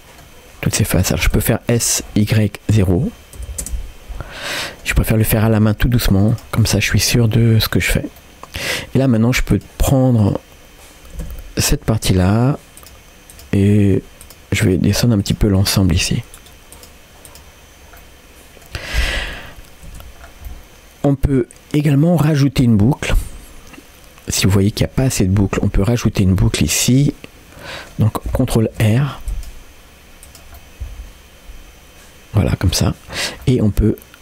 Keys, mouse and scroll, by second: 0.7 middle click, 1.4 s, 4.6 middle click, 5.5 s, 6.6-7.9 middle drag, 8.2 middle click, 9.5 click, 10.2-11.2 drag, 11.2 g, 12.8 click, 13.3 click, 13.7 g, 14.6 click, 14.9 g, 15.6 click, 15.8 g, 16.8 click, 17.3 click, 18.0 middle click, 19.9 Tab, 20.2 scroll down 1, 20.5 middle click, 22.7 middle click, 23.1 scroll up 1, 23.2 Tab, 24.4 middle click, 26.4-27.9 middle drag, 28.7 ctrl+r, 30.6-32.7 middle drag, 33.5 middle click.